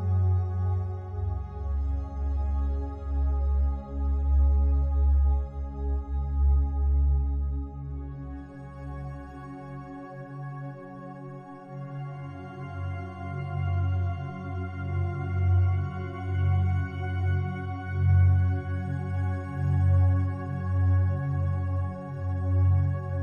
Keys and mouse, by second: 0.7 click, 1.9-3.2 alt+drag, 4.1 click, 4.6 alt+click, 5.5 click, 6.1 alt+click, 6.9 click, 8.7-10.1 drag, 10.3-12.1 alt+drag, 10.3 typing, 12.5 3, 13.7-15.4 drag, 15.6 click, 16.0 click, 16.4 ctrl+alt+click, 16.8 ctrl+alt+click, 17.1 alt+click, 18.0 alt+click, 18.5 ctrl+alt+click, 19.0 alt+click, 19.7 alt+shift+click, 20.3 ctrl+alt+click, 21.5 alt+click, 22.3 ctrl+alt+shift+click.